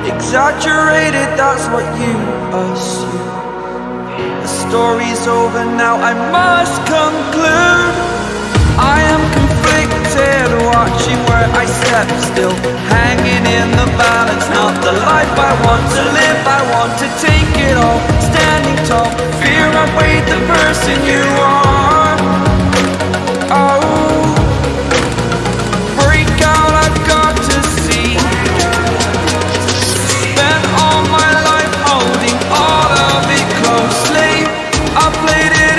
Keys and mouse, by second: 6.4 click, 7.2-7.9 typing, 9.8 click, 12.8 click, 15.5 right click, 17.5 click, 19.7 click, 23.3 click, 25.7 right click, 26.3 right click, 26.8 click, 27.5-28.5 drag, 29.6 click, 31.7 click, 33.4-34.6 drag.